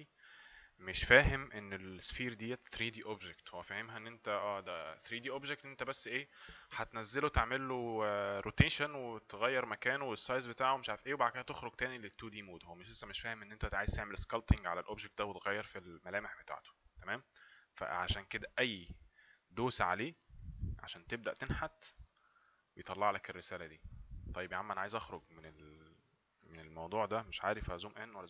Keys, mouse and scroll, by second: 19.3 click, 22.6 click, 25.3 click.